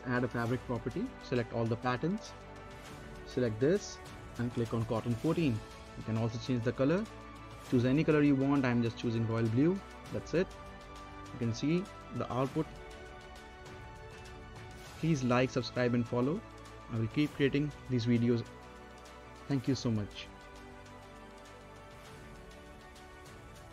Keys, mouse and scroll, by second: 1.3-2.2 scroll down 1, 10.5-12.6 right drag, 13.1 right click, 13.1 click, 13.7-16.5 right drag, 16.5 click, 16.8 scroll down 1, 17.4-18.8 right drag, 18.8-19.3 scroll down 1, 19.3 middle click, 20.0-21.9 right drag, 21.9-23.3 scroll up 2, 23.3 right click.